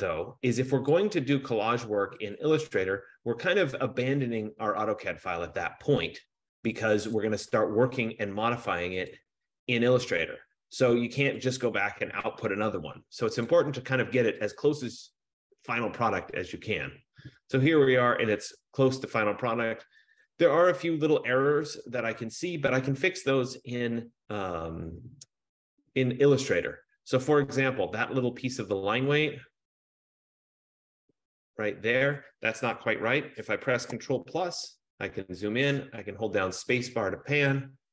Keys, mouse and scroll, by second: 1.0 click, 2.4 click, 7.7 click, 9.4 click, 11.4 click, 11.6 F15, 13.6 click, 14.6 click, 29.8 scroll, 30.8 scroll, 34.4 ctrl+=, 34.8 ctrl+=, 35.2 ctrl+=, 37.2-37.9 scroll.